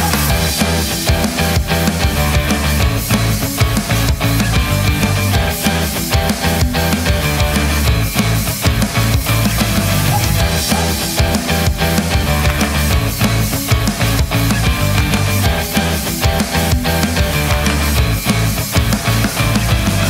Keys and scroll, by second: 11.6-13.0 typing.